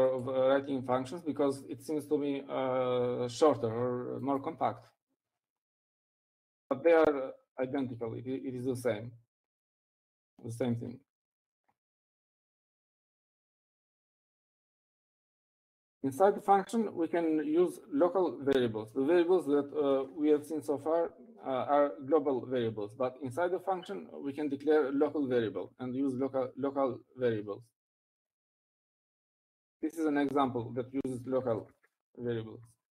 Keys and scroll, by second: 6.9-7.8 typing, 21.1-21.8 typing, 30.4-31.3 typing, 32.6-32.9 typing.